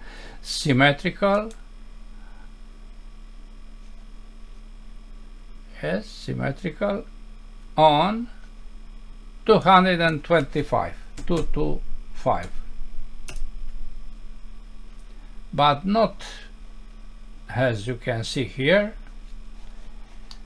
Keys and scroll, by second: 13.3 Return, 20.3 F6.